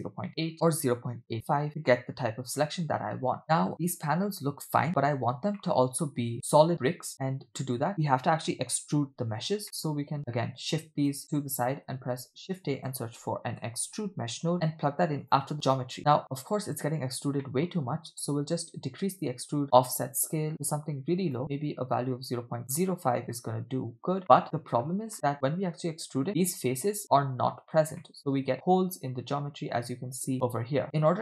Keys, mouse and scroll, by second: 0.5 click, 0.5 middle click, 3.4 middle click, 3.4 scroll down 2, 4.0 scroll up 2, 5.6 shift+middle click, 6.3 middle click, 6.3 scroll down 2, 6.7-7.1 scroll up 1, 7.1-7.5 scroll down 1, 7.9-8.3 scroll up 1, 9.4 scroll down 1, 9.6 middle click, 10.2 scroll down 2, 10.6-11.2 drag, 11.2 click, 12.0 shift+a, 17.4 middle click, 17.9 scroll up 2, 18.8-21.4 shift+drag, 22.2 scroll up 2, 22.7 middle click, 24.2 middle click, 25.1 middle click, 25.8-26.5 scroll up 1, 26.6-27.0 scroll down 1, 28.0 middle click, 30.8 w.